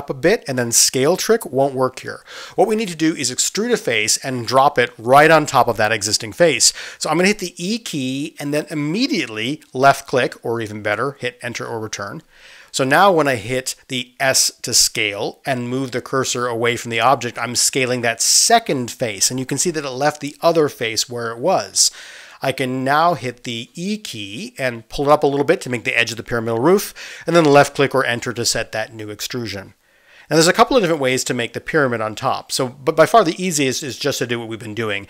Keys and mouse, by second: 8.4 e, 15.0 s, 25.4 e.